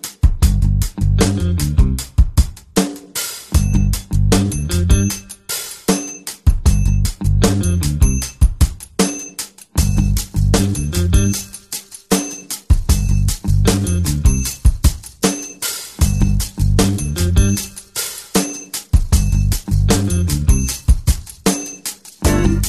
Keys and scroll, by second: 3.3 Return.